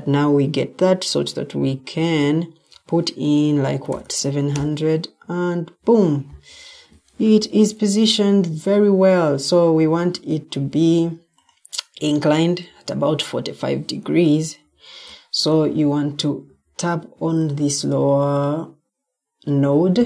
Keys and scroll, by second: 3.6-4.4 typing, 6.2 Escape, 7.2-8.7 typing, 9.8 Escape, 10.6 Escape, 16.4 Escape.